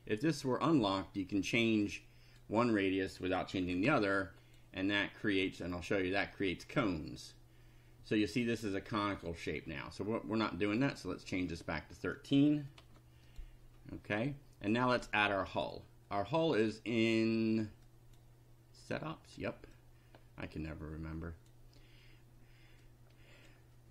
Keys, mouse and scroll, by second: 0.6 click, 1.4 click, 1.8 click, 3.1 click, 3.4-4.4 typing, 4.4 click, 5.5 click, 10.7 click, 11.3 click, 12.4 1, 12.8 3, 13.3 click, 15.0 click, 17.8 click, 19.7-21.7 drag, 22.8 click.